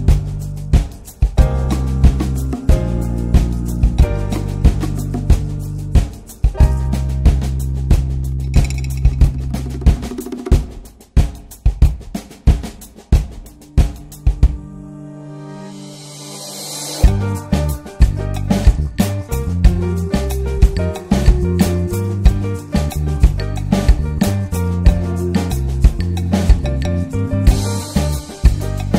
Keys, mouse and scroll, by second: 0.1 scroll down 1, 1.3-3.6 drag, 3.6 scroll down 2, 3.8 scroll up 1, 3.9-6.9 middle drag, 6.9 scroll up 2, 7.3-8.9 middle drag, 8.9-9.5 scroll down 5, 9.5-10.1 shift+middle drag, 10.1 scroll up 1, 10.8 shift+middle click, 11.1 scroll up 1, 11.4-13.0 middle drag, 13.0 click, 13.6-14.0 scroll down 2, 14.0 middle click, 14.3-15.0 scroll up 2, 14.6 shift+middle click, 15.0-16.2 middle drag, 16.2-16.5 scroll down 1, 16.5 middle click, 17.4-17.7 scroll down 4, 19.5-21.0 drag, 22.8-27.1 middle drag, 27.1 click, 27.8 click, 28.4 click.